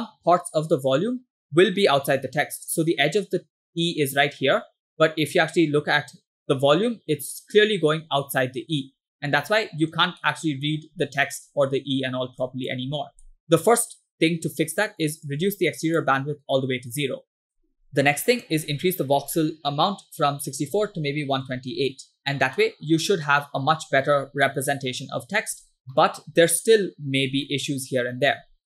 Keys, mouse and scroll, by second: 0.1 m, 1.2 m, 2.3 middle click, 4.9 m, 9.3-10.0 middle drag, 10.2-10.9 shift+middle drag, 12.4 click, 12.9-13.5 scroll up 3, 13.3 middle click, 15.3 click, 17.7 click, 17.9 ctrl+z, 18.4-22.0 drag, 22.7-24.1 middle drag, 24.5-25.4 shift+middle drag, 26.0 middle click, 26.9-27.3 middle drag, 27.5-28.3 shift+middle drag.